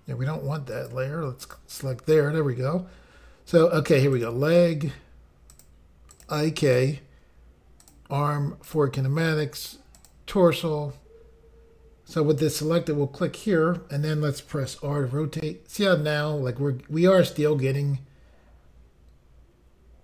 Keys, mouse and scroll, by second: 0.7 click, 1.4 click, 4.1 click, 5.5 click, 6.1 click, 6.7 click, 7.8 click, 8.7 click, 8.8 click, 10.0 click, 10.1 click, 12.4 click, 16.1 r.